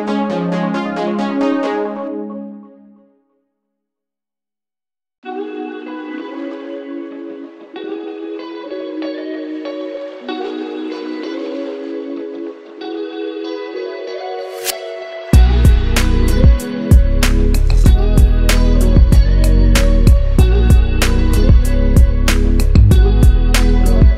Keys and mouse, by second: 0.7-1.9 drag, 17.0-18.8 drag, 23.3-24.1 drag.